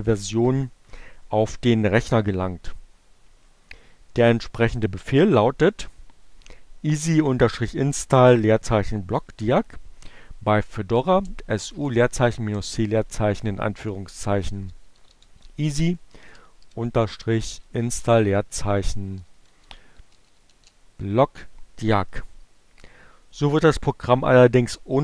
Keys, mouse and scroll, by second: 9.9-10.9 typing, 11.9-16.6 typing, 17.9-21.2 typing.